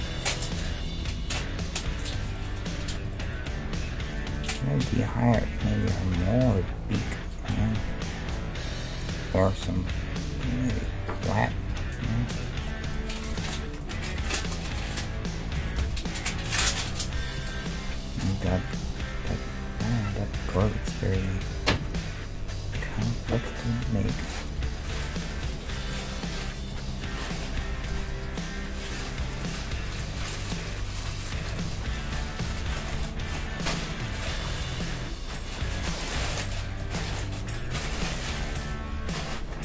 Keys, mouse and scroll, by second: 0.0 g, 0.6-5.3 middle drag, 1.0 g, 3.7 Tab, 4.2-6.1 right drag, 9.2-12.2 right drag, 9.4-11.1 middle drag, 9.8 d, 10.7 s, 11.7 s, 12.7-16.7 middle drag, 14.2 s, 15.6 g, 17.8-19.4 middle drag, 20.4-22.5 middle drag, 21.5 g, 23.0 d, 24.1 s, 26.1-30.4 middle drag, 26.9 g, 31.6 middle click, 32.2-35.0 right drag, 32.5 Tab, 34.6 g, 35.0-36.3 middle drag, 36.5-38.7 middle drag, 37.7 g, 38.7-39.6 right drag, 39.0 middle click, 39.0 g.